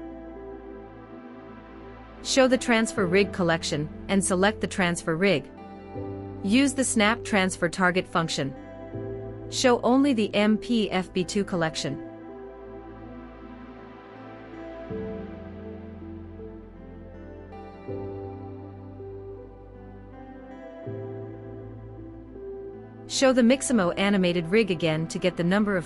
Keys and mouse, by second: 2.0 click, 4.4 shift+click, 6.1-8.0 drag, 10.0 click, 11.5 click, 13.2 click, 15.3 space, 16.8 space, 18.0 click, 18.1 click, 18.2 click, 18.3 click, 18.4 click, 22.5 click.